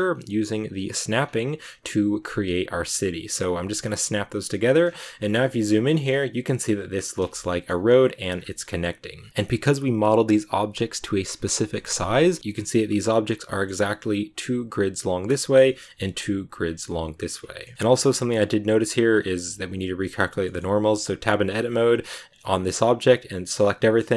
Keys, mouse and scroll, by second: 1.1 scroll up 1, 1.6 right click, 1.7 scroll down 3, 2.1 g, 3.7 scroll up 4, 4.3 middle click, 4.7-5.1 scroll up 6, 4.9 a, 5.1 shift+middle click, 6.1 right click, 7.0 a, 7.2 shift+middle click, 7.7-8.2 scroll up 2, 8.2 scroll down 2, 8.4 shift+middle click, 9.0 right click, 9.2 scroll down 1, 9.3-12.0 middle drag, 12.0 scroll up 1, 12.1 middle click, 13.1 scroll down 2, 13.4 middle click, 13.6-15.3 scroll up 2, 15.3-16.6 shift+middle drag, 16.6 scroll down 1, 16.8 middle click, 17.3 scroll up 2, 17.5 middle click, 17.9 scroll up 2, 18.0 middle click, 19.0 shift+scroll down 1, 19.1-20.0 shift+scroll up 2, 20.0-20.3 scroll up 1, 20.3 middle click, 20.6 Tab, 21.1 a, 21.3 a, 22.2 scroll up 2, 22.9 a, 23.7-24.1 shift+middle drag.